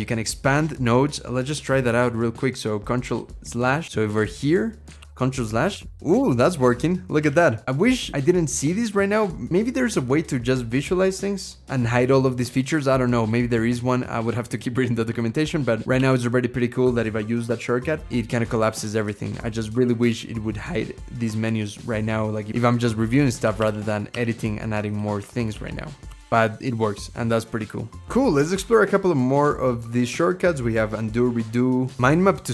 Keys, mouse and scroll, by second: 4.8 ctrl+/, 5.6 ctrl+/, 6.0 ctrl+/, 6.5 ctrl+/, 7.0 ctrl+/, 15.8 ctrl+/, 16.6 ctrl+/, 17.3 ctrl+/, 17.8 ctrl+/, 18.1 ctrl+/, 19.2 ctrl+/, 19.6 ctrl+/, 20.5 scroll down 2, 21.1-21.4 scroll down 3, 21.4-22.5 scroll up 3, 22.5 ctrl+w, 23.4 ctrl+/, 23.9 ctrl+/, 25.3 ctrl+/, 25.9 ctrl+/, 25.9 ctrl+/, 26.3 ctrl+/, 26.5 ctrl+/.